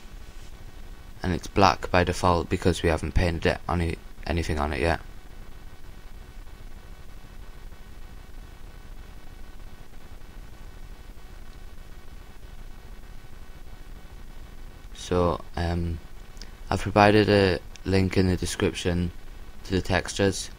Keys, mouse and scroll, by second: 6.6-7.3 scroll down 1, 7.3-11.1 middle drag, 11.1-12.9 drag, 15.5-20.5 drag.